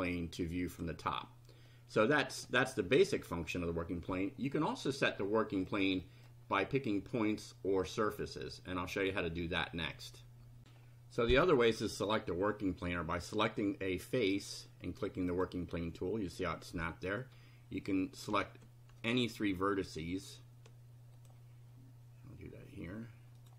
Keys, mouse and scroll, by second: 0.7 click, 1.6-2.6 middle drag, 2.7-3.7 middle drag, 5.2-5.8 middle drag, 6.0 middle click, 10.6 ctrl+r, 13.3 click, 15.3 click, 19.0 ctrl+click, 21.2 ctrl+click, 23.4 ctrl+click.